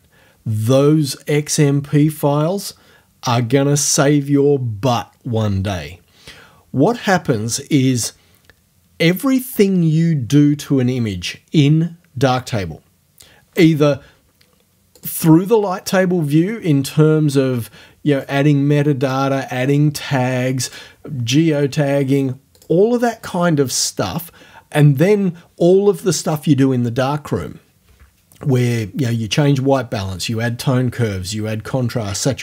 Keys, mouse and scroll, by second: 15.0 click, 18.1 click, 19.1 click, 20.7 click, 22.6 click.